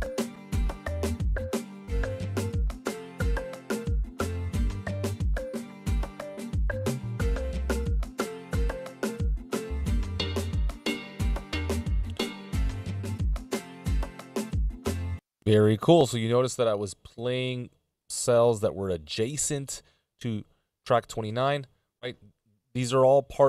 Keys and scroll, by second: 14.0 Return.